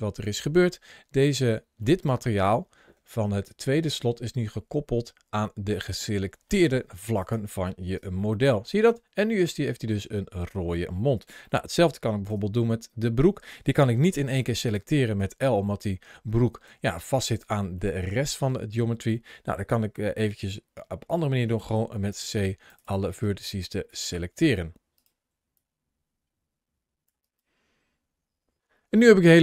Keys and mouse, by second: 1.6 middle click, 2.7 ctrl+shift+a, 6.3 ctrl+shift+middle click, 7.8 Tab, 8.2-8.6 middle drag, 9.1-10.4 middle drag, 11.2-11.6 shift+middle drag, 12.1 Tab, 13.8 l, 15.0 l, 15.3 middle click, 16.5 l, 17.7-18.9 middle drag, 21.6 c, 23.0 right click, 23.4 c, 24.7 right click, 24.7-27.5 typing, 25.5 middle click, 25.7 right click, 25.8 middle click, 26.1 middle click, 26.4 right click, 26.5 middle click, 26.8 right click, 27.0 middle click, 27.3 right click, 27.4 middle click, 27.5 right click, 27.6 middle click, 27.7 middle click, 27.9 right click, 27.9 middle click, 28.4 ctrl+KP_Add, 28.4 middle click.